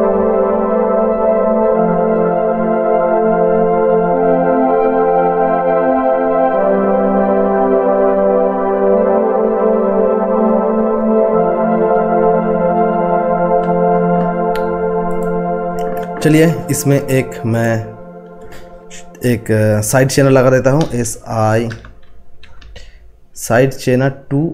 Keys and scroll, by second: 20.8-23.1 typing.